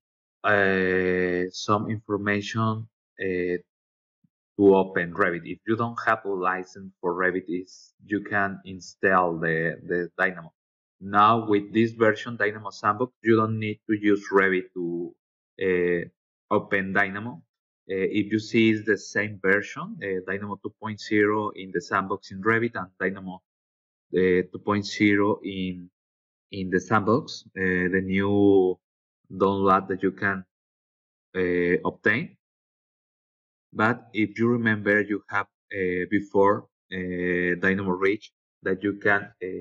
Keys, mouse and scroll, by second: 5.2 click, 20.5 click, 21.7 click, 22.1 click, 23.6-25.4 typing, 30.3-31.6 typing, 31.8 Return, 37.3 click.